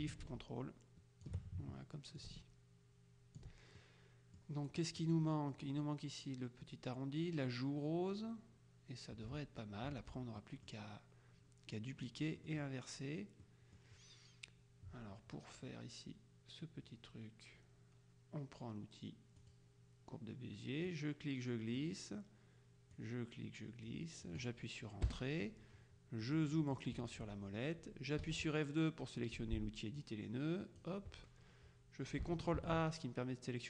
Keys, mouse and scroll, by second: 2.3-4.0 ctrl+drag, 10.5 middle click, 12.5 middle click, 13.5 middle click, 19.5 click, 20.9 click, 23.0-24.8 drag, 25.1 Return, 26.3-27.3 drag, 28.3 F2, 30.1 click, 32.7 ctrl+a.